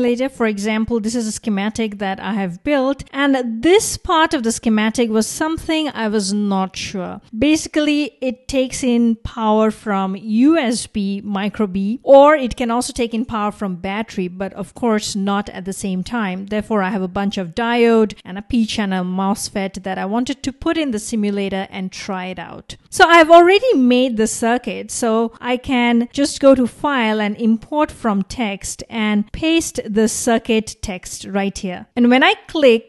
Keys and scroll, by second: 29.2 super+v.